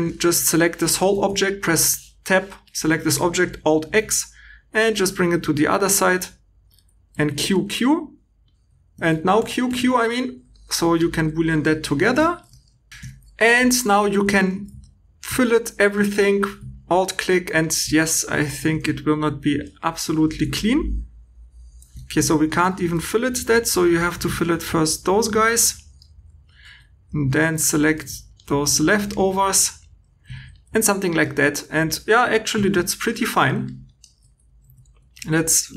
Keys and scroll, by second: 8.9 q, 9.3 q, 9.6 q, 12.9 super+z, 14.4 super+2, 21.9 Escape, 22.9 2, 26.6 2, 30.3 shift+e, 32.6 shift+e, 34.4-34.8 typing.